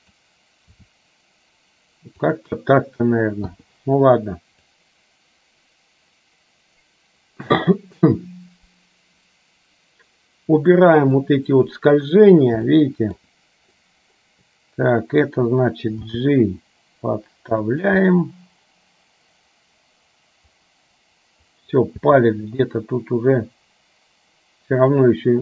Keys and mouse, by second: 0.8 r, 3.6 i, 4.9-11.1 drag, 11.3-12.3 middle drag, 12.8 middle click, 13.9-15.3 middle drag, 16.2 g, 18.2-21.7 middle drag, 22.1 g.